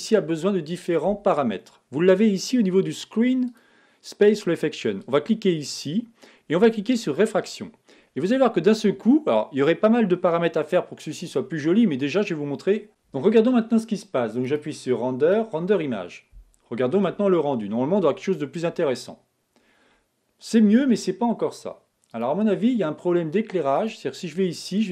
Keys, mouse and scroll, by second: 5.7 click, 7.4 click, 22.9 click.